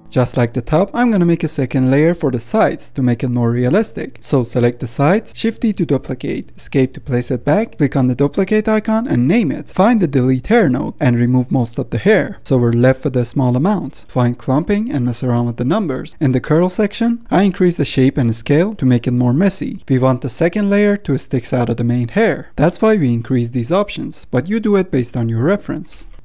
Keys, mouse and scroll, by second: 0.5 F10, 0.6-1.5 scroll up 4, 1.5-2.0 shift+middle drag, 2.0 scroll up 1, 2.3 click, 2.7-5.3 middle drag, 5.4 shift+d, 8.0 click, 8.7-9.3 drag, 9.3 BackSpace, 10.5-11.9 scroll up 1, 11.9-14.1 drag, 14.1 scroll down 4, 14.2 middle click, 14.9 scroll up 1, 15.2-16.6 drag, 16.7 middle click, 17.2-19.3 drag, 19.5-22.0 drag, 22.0 ctrl+z, 23.1-26.1 drag.